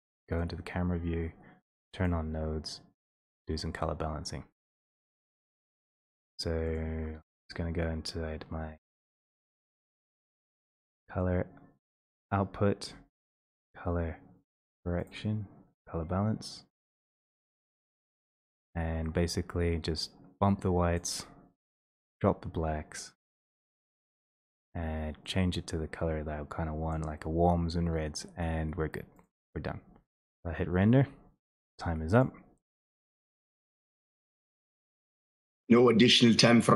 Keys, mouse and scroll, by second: 0.6 click, 3.0-3.4 scroll, 3.8-4.7 scroll, 6.8 click, 8.8 click, 11.1-11.6 scroll down 4, 11.9-12.6 scroll down 5, 12.0 click, 14.5 click, 15.2 click, 15.7 click, 15.7 right click, 15.7 scroll, 17.7 click, 18.3-20.3 scroll, 20.9 middle click, 21.1 click, 24.2 click, 29.0 click, 30.9 click, 31.0 click, 31.0 scroll, 31.6 middle click, 32.0 scroll, 32.2 click, 35.7 click.